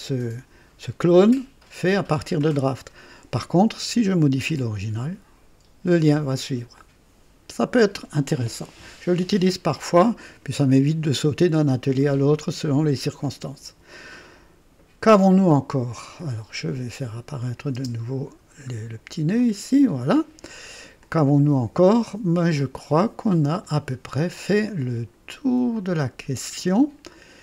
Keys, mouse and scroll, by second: 6.7-8.1 drag, 9.4 right click, 13.2-15.2 drag, 15.9 click, 17.3 click, 17.7 space, 18.4 scroll down 1, 19.3 click, 20.9-23.7 drag, 24.0 scroll up 1, 24.6 right click, 25.7-27.4 drag.